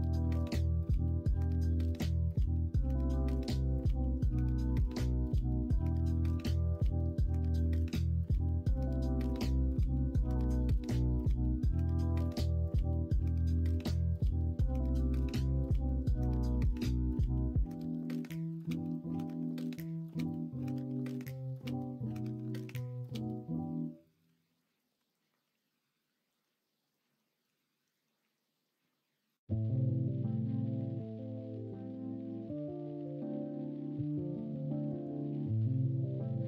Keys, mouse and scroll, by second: 7.1 middle click, 7.9 Tab, 8.4-9.1 middle drag, 9.5 middle drag, 9.6 middle click, 12.0-12.4 middle drag, 13.2 middle click, 13.8 middle drag, 14.2 Tab, 15.0 middle click, 15.3 Tab, 16.2 middle drag, 18.3 click, 18.7 Tab, 19.7 l, 20.2 middle click, 21.2 s, 24.2 Tab, 24.9 Tab, 26.4 l, 27.4 s, 32.3 middle click, 35.3 s.